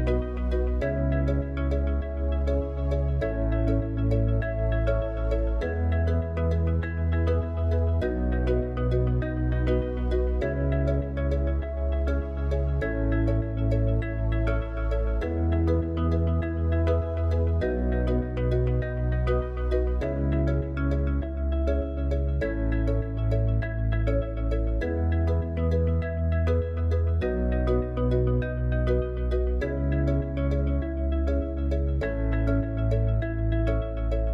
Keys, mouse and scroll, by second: 2.1-6.1 drag, 9.3 KP_0, 32.7-33.8 drag.